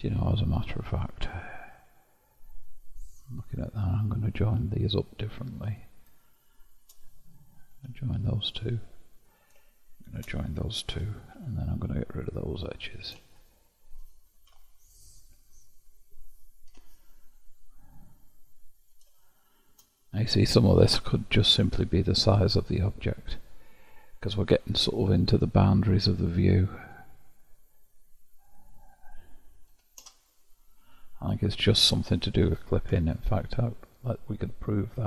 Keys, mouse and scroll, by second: 1.1-1.9 scroll down 1, 3.1-5.7 middle drag, 5.7 click, 6.8 shift+click, 7.8 j, 9.2 click, 10.1 shift+click, 11.0 j, 11.4 2, 12.2-14.5 drag, 14.5 ctrl+x, 15.9 middle click, 16.7 1, 17.9-20.1 middle drag, 20.1-20.7 scroll up 1, 20.7-21.7 scroll down 1, 21.7-23.2 scroll down 7, 23.2 scroll down 1, 23.3-24.5 scroll up 4, 24.5-25.8 scroll up 3, 25.8-26.9 scroll up 1, 26.9 click, 28.5-31.5 drag, 33.0 Tab, 33.9-34.3 scroll down 4, 34.6-35.0 scroll down 15.